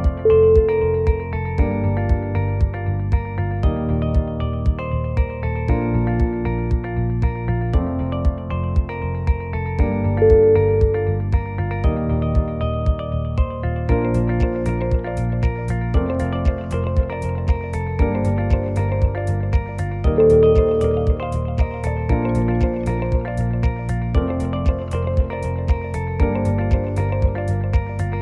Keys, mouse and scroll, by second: 0.1 f, 0.5 click, 0.8 g, 1.9 click, 2.2-2.6 scroll down 4, 2.6 middle click, 3.3 KP_1, 3.7 scroll up 1, 4.4 click, 4.8 g, 6.1 g, 7.3 ctrl+z, 7.8 click, 8.2 g, 8.9 g, 9.9 g, 10.8 click, 11.1 g, 12.0 2, 12.1 click, 12.5 g, 14.8 Tab, 15.4 Tab, 15.6 click, 16.0 shift+click, 16.7 g, 18.2 Tab, 19.3 Tab, 19.6 click, 20.2 g, 21.7 ctrl+z, 22.0 click, 22.8 Tab, 23.2 middle click, 24.4 right click, 25.5 click, 26.1 click, 26.8 click, 26.8 middle click.